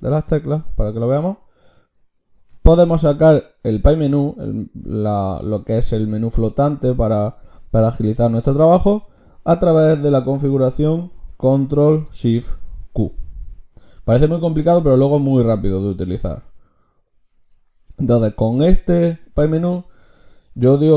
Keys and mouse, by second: 0.5 n, 2.3 ctrl+shift+q, 12.7 ctrl+shift+q.